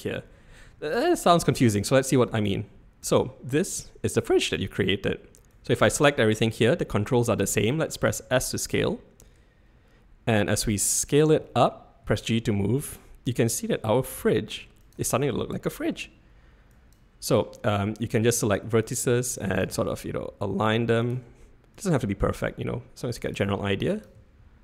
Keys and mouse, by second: 2.5-3.1 drag, 5.5-5.9 drag, 8.0 s, 12.0 g, 16.8 click, 18.2 g, 19.5 click, 19.7 g, 21.8 click, 21.9 g, 24.0 click, 24.2 g.